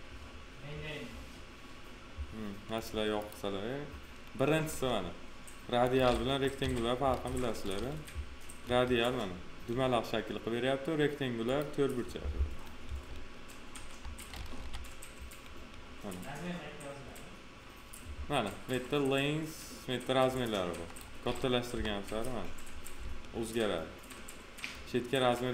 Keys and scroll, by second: 6.5 p, 8.6 F4, 14.5 f, 21.6 p.